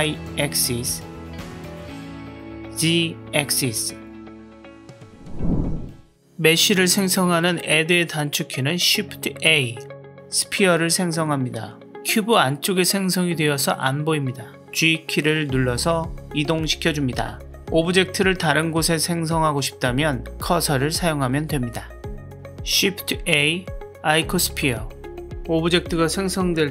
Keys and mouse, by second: 2.1 z, 8.8 shift+a, 14.5 g, 18.9-20.4 middle drag, 20.8-22.4 drag, 23.1 shift+a.